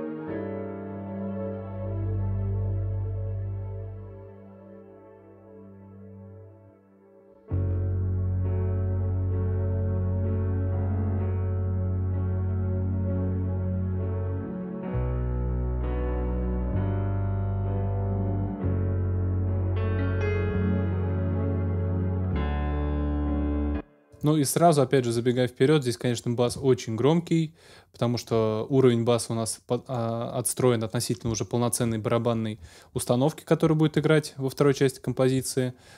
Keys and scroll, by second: 23.5 ctrl+alt+space.